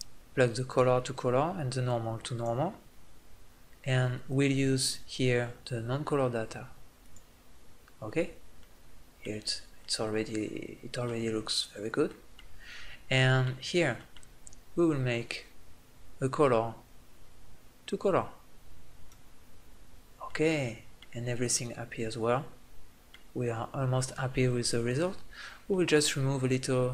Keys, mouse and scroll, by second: 3.1-5.7 middle drag, 5.7-8.1 drag, 8.4 click, 16.1-17.7 drag, 18.9 middle click, 24.5 middle click.